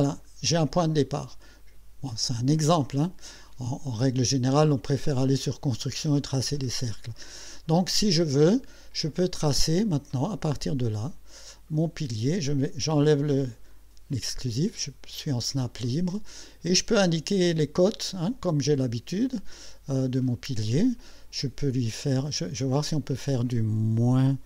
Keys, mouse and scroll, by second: 9.9 click, 11.0 click, 13.7 click, 22.7 click.